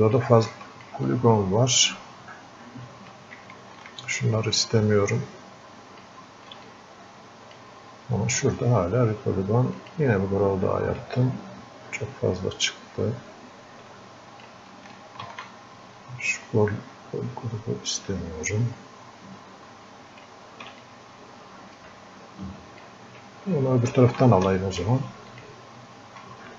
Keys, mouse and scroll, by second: 0.5 alt+click, 1.1-3.8 drag, 3.8-6.7 ctrl+alt+shift+drag, 7.0 ctrl+click, 11.3-14.8 drag, 15.5-20.9 ctrl+alt+shift+drag, 20.9-25.2 ctrl+drag, 25.3 ctrl+shift+click.